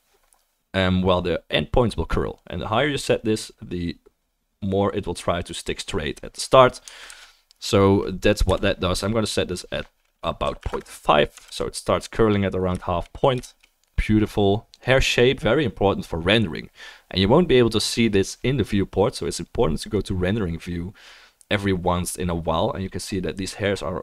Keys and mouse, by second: 7.3 ctrl+z, 8.4 KP_0, 11.8-20.1 drag, 11.8-20.7 middle drag, 11.8-24.0 right drag, 11.9 ctrl+s.